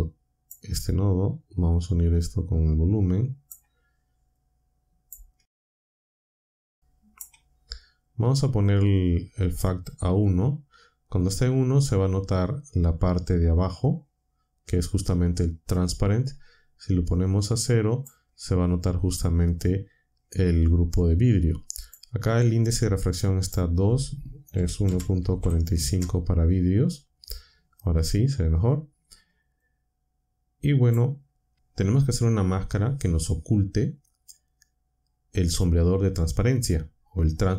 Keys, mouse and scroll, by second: 1.8-3.6 drag, 4.3-5.2 drag, 5.6 ctrl+shift+click, 6.5-7.3 drag, 8.6-9.7 drag, 17.1-18.2 drag, 21.0 click, 23.3 click, 24.3-25.8 typing, 29.6-31.0 drag, 34.0-34.8 drag.